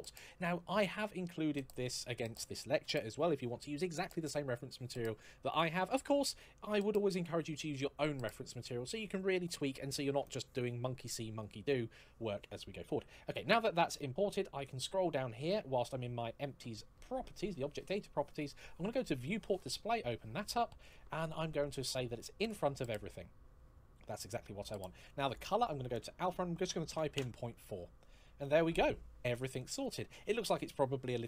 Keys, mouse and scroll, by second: 14.5 scroll down 1, 19.3 click, 19.8 scroll down 1, 22.2 click, 23.0-23.7 scroll up 1, 23.7 scroll down 1, 23.9-24.3 scroll up 1, 26.7 KP_4, 27.3 Return, 28.6 scroll up 1, 28.9-29.3 scroll down 1, 29.3-30.5 scroll up 1.